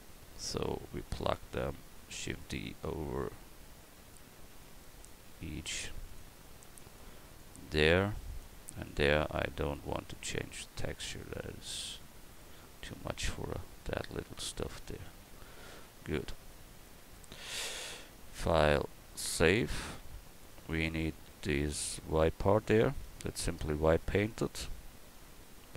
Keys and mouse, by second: 2.2 shift+d, 4.5 shift+d, 6.7 shift+d, 8.8 shift+d, 10.7 a.